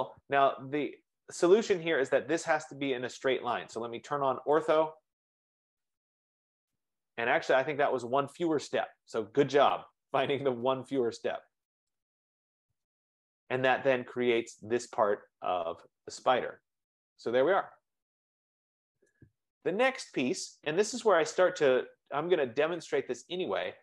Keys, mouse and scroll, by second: 0.3-3.9 drag, 4.7 click, 6.7 click, 12.3-14.2 drag, 14.2 right click, 14.8-16.5 right drag, 16.5-17.5 drag, 19.2-22.4 right drag, 22.4 click, 23.6 scroll.